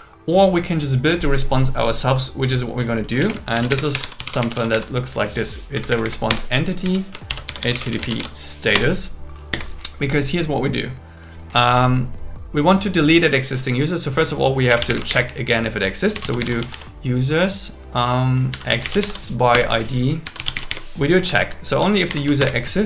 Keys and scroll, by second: 3.2 BackSpace, 3.5 shift+., 3.7 space, 3.9 shift+r, 5.7 Down, 6.3 Return, 7.3 shift+h, 7.9 shift+s, 8.7 Return, 9.5 Down, 14.9 space, 15.1 shift+8, 19.5 Return, 21.2 Right, 21.8 space, 22.1 alt+8, 22.4 Return.